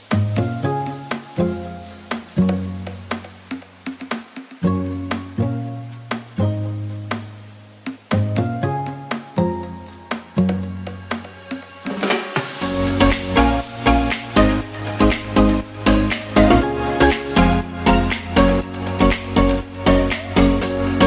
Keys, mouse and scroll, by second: 11.2 g, 11.4 z, 14.2 y, 14.6 g, 14.8 x, 15.3 click, 16.8 s, 17.5 y.